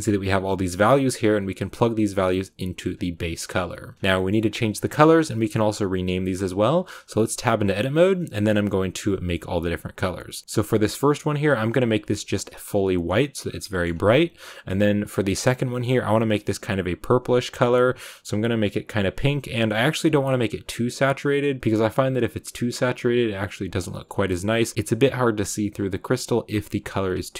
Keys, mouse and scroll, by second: 2.9-8.7 drag, 16.7 click, 18.8 click, 20.3 click, 21.6 click, 24.7 click.